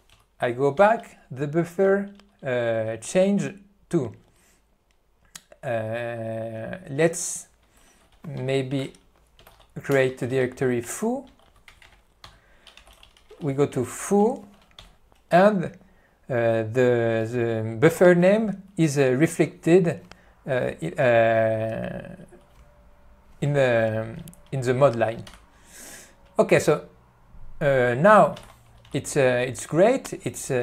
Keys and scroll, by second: 0.3 -, 0.9 Return, 11.3 BackSpace, 11.6 BackSpace, 11.8 o, 12.1 o, 12.5 Return, 14.8 Return, 25.4 Left, 28.7 p, 29.0 q.